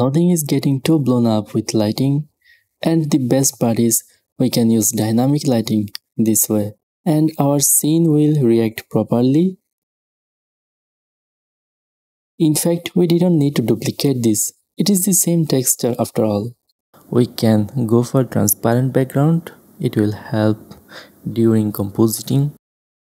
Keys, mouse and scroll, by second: 0.0-2.5 middle drag, 1.0 g, 5.0-6.2 drag, 5.0-6.2 right drag, 6.5 click, 6.5 right click, 6.6-8.6 middle drag, 8.8 w, 10.2 w, 10.4-10.8 middle drag, 11.1-12.1 drag, 12.0 shift+space, 12.4-17.5 drag, 13.7-16.9 right drag, 17.2 x, 17.8 KP_0, 18.8-21.3 drag, 21.6 click, 22.8 a.